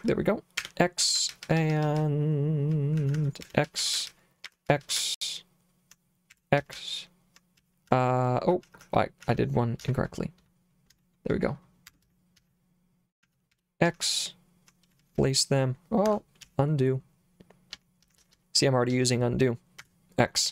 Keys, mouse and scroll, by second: 0.0-9.8 typing, 10.9 p, 11.9 Escape, 12.0-16.4 typing, 16.1 Escape, 17.7-19.8 typing.